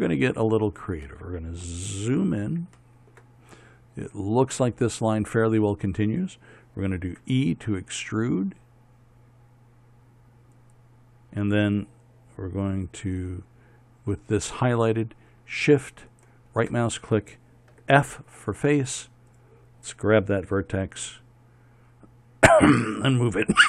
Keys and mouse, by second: 1.2-7.7 middle drag, 7.7 e, 16.7-18.3 right drag, 18.3 f, 21.4 g.